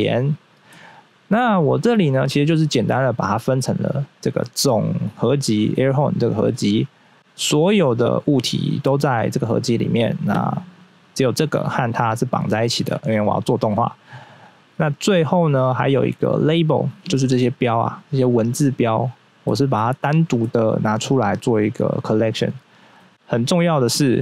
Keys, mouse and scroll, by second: 0.7 middle click, 1.2-2.6 scroll up 1, 3.9 click, 6.3 scroll down 1, 7.2 click, 10.7 right click, 11.2 right click, 11.5 double right click, 12.2 double right click, 14.0 scroll up 1, 17.1 middle click, 17.3 middle click, 17.7 right click, 18.4 right click, 18.7 right click, 19.4 middle click, 19.7 middle click, 20.0 middle click, 23.0 middle click.